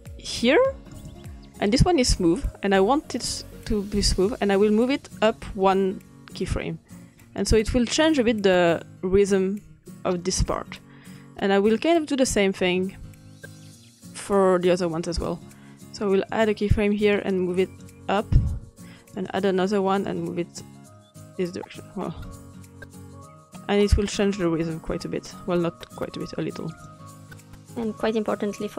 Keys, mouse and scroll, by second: 0.0-2.5 drag, 3.3-7.5 drag, 8.0 click, 11.2 click, 16.3 click, 17.1 click, 19.1 click, 20.1-21.4 drag, 26.0-26.7 drag, 26.9 click, 27.6 click.